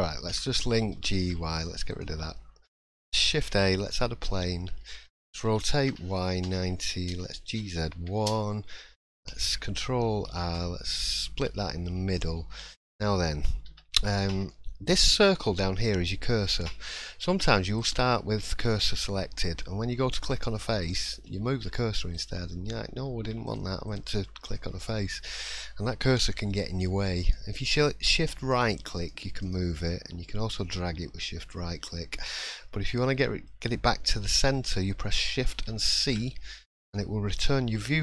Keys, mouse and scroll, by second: 0.3 l, 0.9 g, 2.3 middle click, 3.3 shift+a, 4.4 shift+middle click, 9.0 scroll up 1, 10.3 ctrl+r, 11.5 middle click, 11.8 scroll up 1, 12.1 shift+middle click, 12.6-13.2 scroll up 2, 13.7 1, 14.5 shift+middle click, 17.7 click, 20.2-20.8 scroll down 1, 20.8-21.2 scroll down 5, 21.2 shift+middle click, 21.7-22.1 scroll up 1, 22.1 click, 23.2 3, 23.5 click, 23.9 click, 24.9 shift+middle click, 27.2-31.7 shift+right click, 32.1 shift+middle click, 32.6-33.1 scroll up 4, 33.1 shift+middle click, 33.5 shift+scroll up 1, 36.0 shift+c.